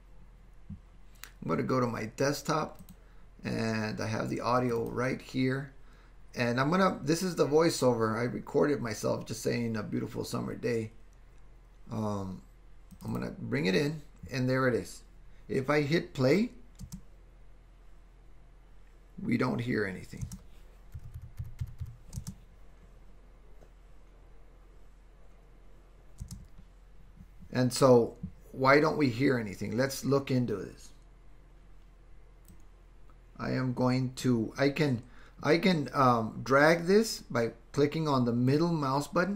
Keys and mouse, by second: 16.9 space, 20.3 space, 22.3 space, 26.3 space, 32.6-34.2 drag, 38.6-39.3 middle drag.